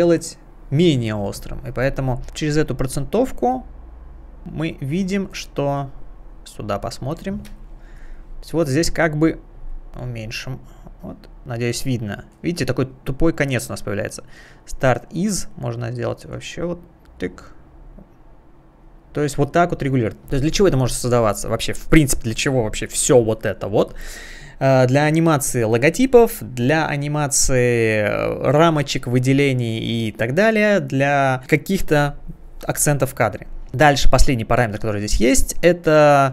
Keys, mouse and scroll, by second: 2.2 click, 5.3 click, 6.3-7.0 scroll up 1, 7.5 space, 7.6 click, 7.7 click, 7.9 click, 8.6 space, 9.6 space, 12.3 click, 14.6 click, 19.3 click, 35.3 click, 36.0 scroll down 1.